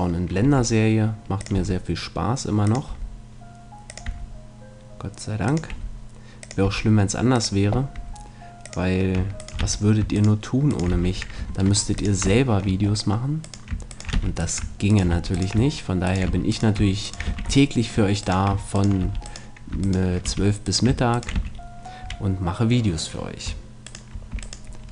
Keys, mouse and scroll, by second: 0.1 right click, 0.4 e, 1.4-8.2 drag, 1.6 e, 2.9 e, 4.1 e, 5.7 e, 6.6 e, 8.0 e, 8.7-10.2 drag, 9.4 right click, 9.6 f, 10.9 f, 11.5 ctrl+Tab, 12.4-13.4 middle drag, 14.2 f, 15.1 f, 16.3 f, 17.3 f, 19.0 f, 20.3 f, 21.4 shift+f, 21.7-23.0 right drag, 22.0 a, 23.0 middle click, 23.8 right click.